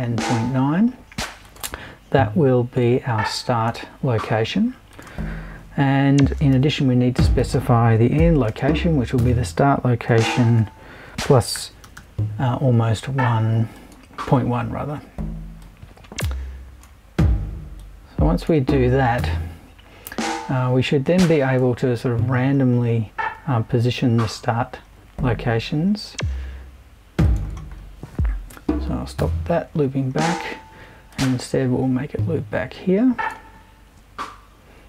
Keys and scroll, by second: 6.5 super+i, 8.2-11.8 typing, 28.5 BackSpace.